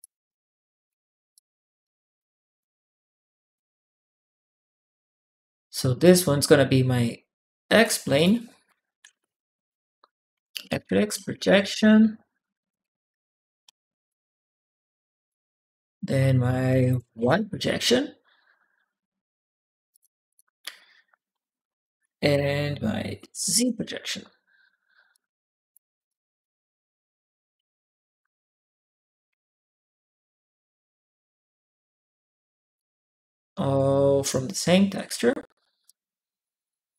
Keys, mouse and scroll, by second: 1.1 click, 2.0 click, 3.0 click, 3.5 click, 4.7-5.8 drag, 7.5 click, 7.9 click, 8.9-11.8 typing, 12.5 click, 13.5 ctrl+c, 13.9 ctrl+click, 15.1 click, 15.4 click, 15.7 ctrl+v, 17.0 shift+y, 17.1 Return, 19.7 shift+click, 20.1 click, 21.2 ctrl+v, 23.0 shift+z, 23.4 Return, 24.9 shift+click, 25.7 click, 25.9 click, 25.9 right click, 27.3-28.7 drag, 30.1-31.4 drag, 32.6 click, 33.7-34.7 drag, 35.6-36.8 drag.